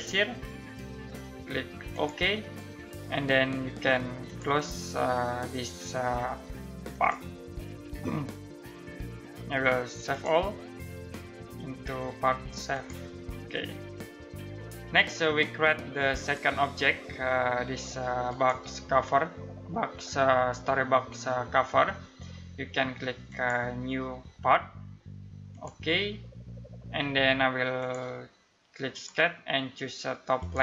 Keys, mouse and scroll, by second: 6.5 click, 9.7 click, 12.3 click, 15.8 click, 22.9 click.